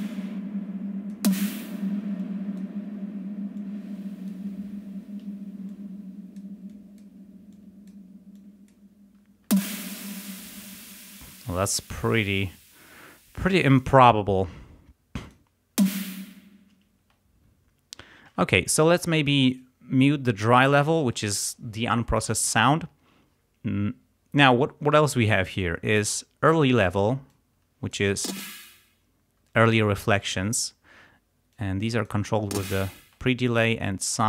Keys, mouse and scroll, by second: 1.9 space, 2.2 click, 3.6 click, 5.7 click, 6.7 click, 7.6 click, 8.4 click, 9.5 space, 14.0 click, 15.3 click, 15.8 space, 17.0 space, 19.6-20.8 drag, 25.6 click, 26.6 click, 27.3 click, 28.2 space, 31.6 click, 32.5 space, 33.2 click, 33.9 click.